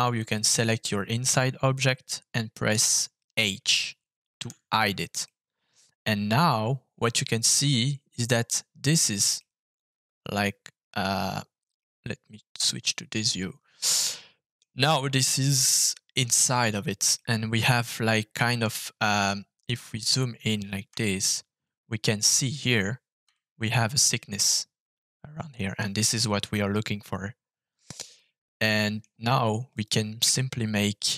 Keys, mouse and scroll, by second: 0.1 click, 4.5 h, 5.2-8.3 middle drag, 9.3 middle click, 12.5 click, 13.1-14.5 middle drag, 15.4 middle click, 17.1-18.6 middle drag, 18.7 scroll up 1, 19.2 shift+middle click, 19.8-20.8 scroll up 5, 21.2 shift+middle click, 22.0 shift+middle click, 23.3-25.7 shift+middle drag, 26.1-28.1 scroll down 5, 28.1 scroll down 2, 28.1 middle click, 29.7 click.